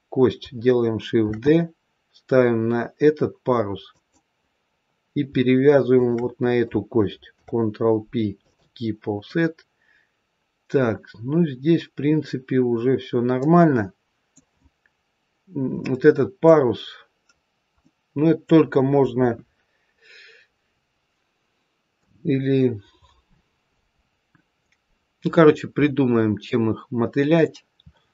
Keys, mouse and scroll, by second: 1.2 shift+d, 5.8 shift+click, 7.3 ctrl+p, 9.2 middle click, 15.7 middle click, 16.7-17.3 scroll down 2, 17.3-17.8 scroll up 1, 17.8 middle click, 19.1 KP_1, 21.9 KP_3, 23.3-24.1 scroll up 1, 24.1-24.7 scroll down 1.